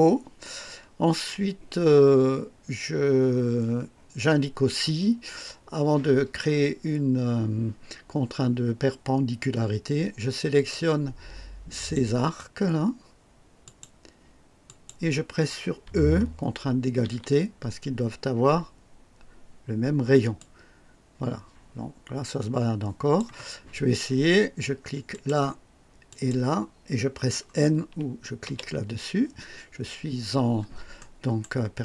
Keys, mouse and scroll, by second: 0.4 scroll up 1, 10.5 click, 11.7 click, 13.6 click, 14.6 click, 16.9 typing, 20.3-23.3 drag, 25.0 click, 26.0 click, 28.4 n, 30.1 scroll down 1, 30.9 right click.